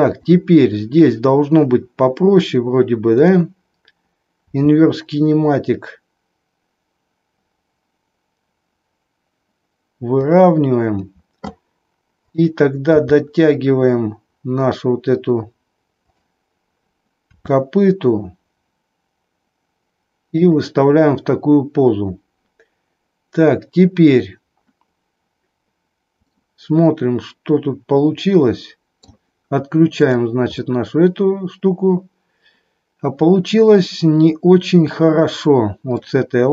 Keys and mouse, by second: 4.5 r, 12.2-13.2 drag, 13.2 g, 17.3 r, 26.3-26.8 middle drag, 27.4-29.1 middle drag, 30.1 click, 30.4-35.9 middle drag.